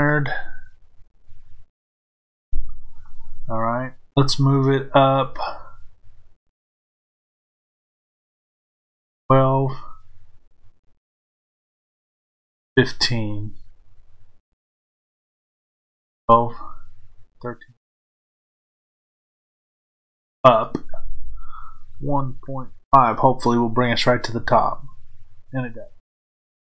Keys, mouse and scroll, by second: 2.3 KP_5, 24.6 KP_Enter.